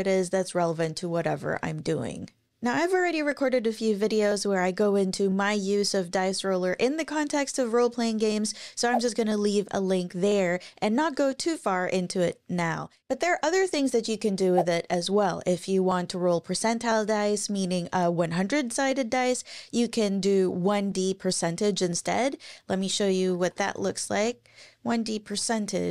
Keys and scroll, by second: 23.2-24.1 typing, 25.3 shift+5.